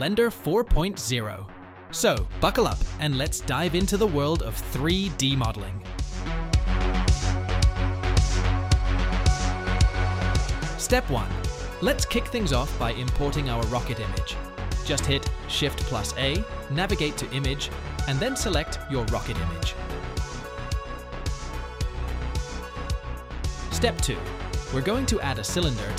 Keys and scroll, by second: 0.0-1.6 typing, 3.1 2, 3.6 ctrl+b, 4.9 Tab, 15.1 a, 15.1 x, 15.8 shift+a, 20.3 alt+r, 20.9-22.8 typing, 22.1 Return, 24.8 shift+a.